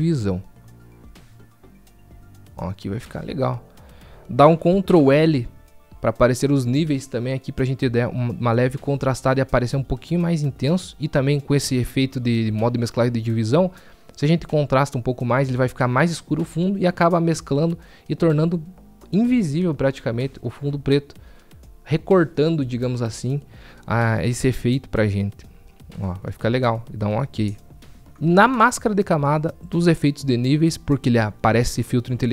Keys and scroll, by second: 4.6 ctrl+l, 8.5 ctrl+l.